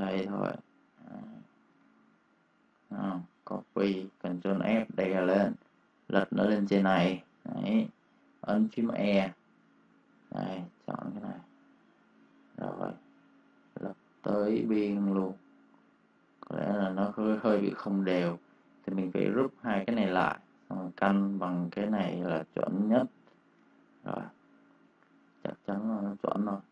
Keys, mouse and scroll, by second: 1.6 v, 1.9 click, 3.2 ctrl+c, 4.8 click, 8.4 e, 10.1 click, 17.4 v, 17.6 click, 19.5 ctrl+g, 19.9 click, 23.5 space, 23.7 click, 24.4 ctrl+click.